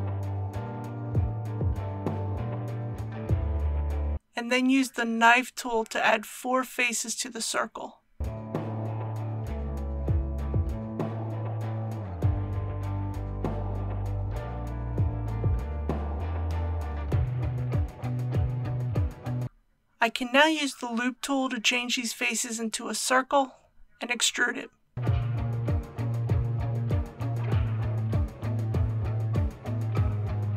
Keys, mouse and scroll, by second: 0.7 click, 1.3 scroll up 1, 4.6 k, 7.1 click, 13.9 k, 15.8 click, 19.8 3, 25.9 click, 26.8 shift+click, 27.4 shift+click, 28.1 shift+click, 30.2-30.5 right drag.